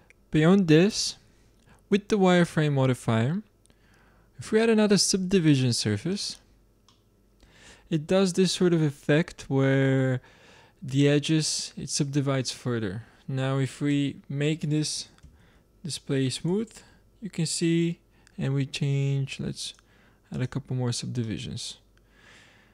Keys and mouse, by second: 1.4-4.4 middle drag, 4.4-6.2 drag, 6.8 middle click, 13.8 space, 19.5-22.0 drag, 22.0-22.7 middle drag.